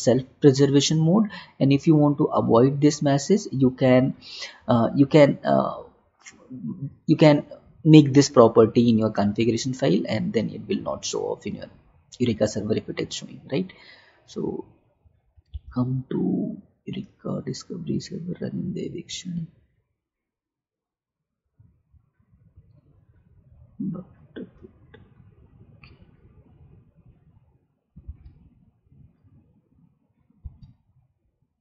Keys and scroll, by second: 15.8 alt+Tab, 28.4 alt+Tab, 30.5 alt+Tab.